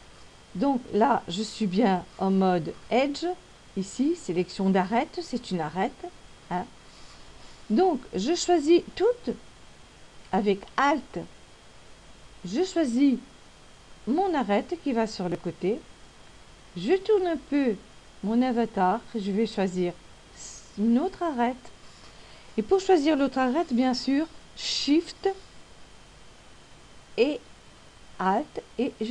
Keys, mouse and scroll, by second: 10.5 alt+right click, 17.2 middle click, 29.0 alt+shift+right click.